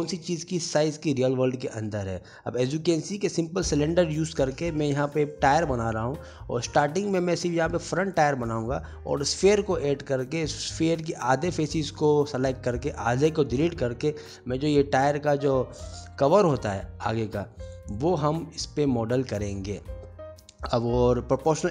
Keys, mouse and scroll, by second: 0.0 middle click, 0.3 Tab, 0.4 middle click, 0.5 ctrl+b, 1.0 Tab, 1.1 ctrl+a, 1.3 ctrl+b, 1.9 middle click, 2.1 Tab, 2.2 middle click, 2.5 click, 2.8 ctrl+z, 2.8 middle click, 2.9 ctrl+z, 3.1 middle click, 3.5 middle click, 3.5 shift+click, 3.5 shift+3, 3.6 middle click, 3.7 ctrl+b, 4.4 middle click, 5.1 Tab, 5.1 shift+a, 6.0 click, 6.1 g, 6.4 s, 6.6 middle click, 7.5 click, 7.6 g, 8.2 s, 8.4 middle click, 8.5 Tab, 8.6 alt+z, 8.9 click, 10.9 click, 11.0 alt+click, 11.3 alt+click, 12.8 Tab, 12.9 alt+z, 13.0 click, 13.1 click, 13.5 g, 14.4 s, 15.0 middle click, 15.2 shift+click, 15.3 middle click, 15.7 g, 16.4 g, 17.1 click, 17.1 middle click, 17.7 Tab, 17.9 alt+z, 18.0 click, 18.1 middle click, 18.3 g, 18.8 click, 18.8 click, 19.4 g, 21.6 middle click, 21.6 g.